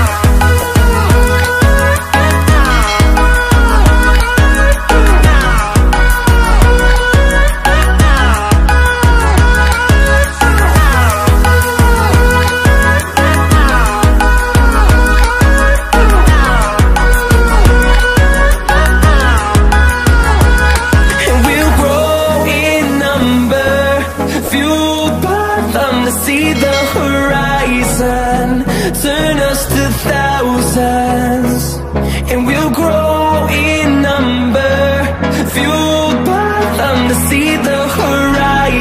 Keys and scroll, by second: 18.6 ctrl+shift+x, 20.2 ctrl+shift+x.